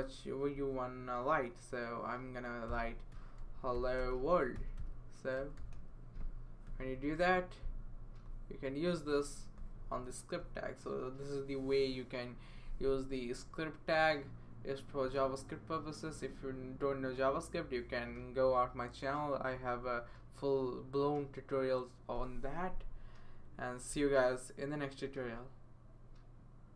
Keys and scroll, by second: 0.5 ", 2.4-7.8 typing.